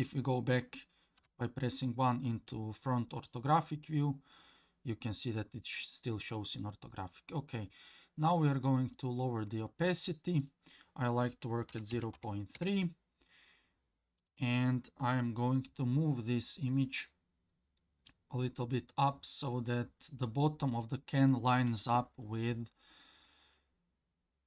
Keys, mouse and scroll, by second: 1.2 KP_1, 8.9 click, 10.4-12.6 drag, 14.2 click, 18.4-18.9 scroll up 2, 19.0-22.0 scroll up 2.